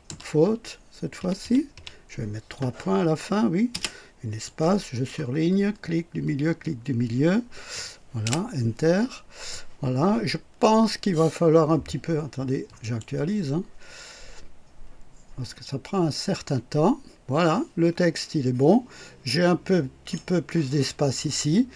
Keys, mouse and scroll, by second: 0.0-1.6 typing, 3.6 typing, 4.4 click, 5.4 middle click, 6.1 middle click, 8.1 Return, 12.7 click, 19.2-20.3 drag.